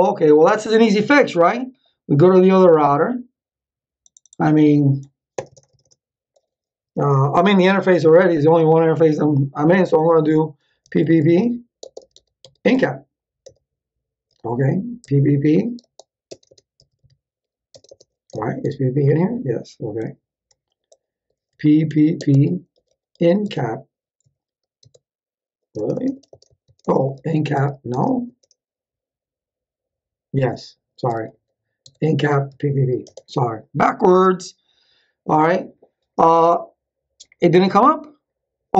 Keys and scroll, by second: 5.3 Return, 11.0-12.9 typing, 13.4 Return, 15.1-18.3 typing, 19.9 ctrl+x, 21.5-24.2 typing, 24.8 Tab, 26.9-28.0 typing, 30.8-32.5 typing, 31.8 Tab, 33.0 Return.